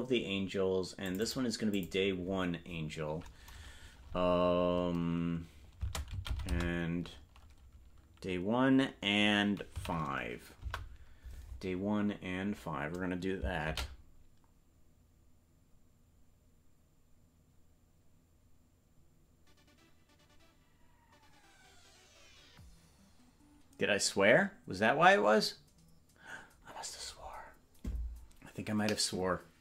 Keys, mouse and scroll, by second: 1.0 click, 1.2-11.3 drag.